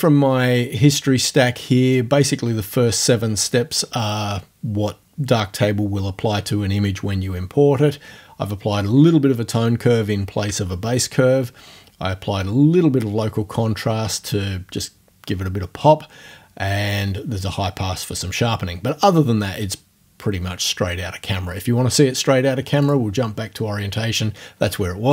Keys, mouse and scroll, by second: 22.8 click.